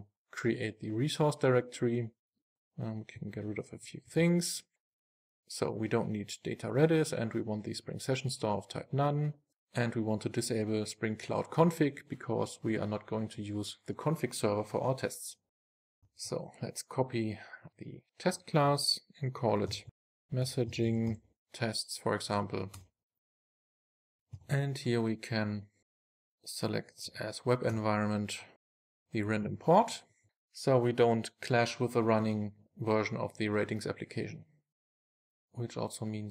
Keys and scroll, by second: 3.2 super+BackSpace, 4.2 super+s, 15.8 super+c, 16.2 super+v, 27.7 Return, 30.1 super+s, 34.9 super+s.